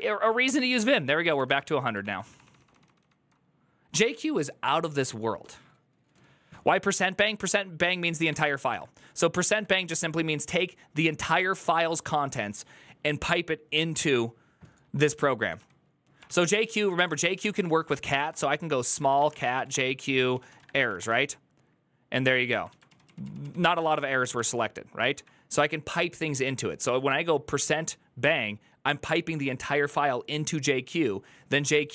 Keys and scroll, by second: 0.5 ctrl+c, 0.5-1.6 typing, 0.7 ctrl+c, 1.8 ctrl+d, 1.9 ctrl+d, 2.1 ctrl+d, 2.2 ctrl+d, 2.6 ctrl+d, 8.1 :, 9.3 typing, 15.0-24.1 typing, 16.0 ctrl+c, 16.2 ctrl+c, 17.2 ctrl+c, 23.2 ctrl+u, 23.7 ctrl+u, 24.9 Up.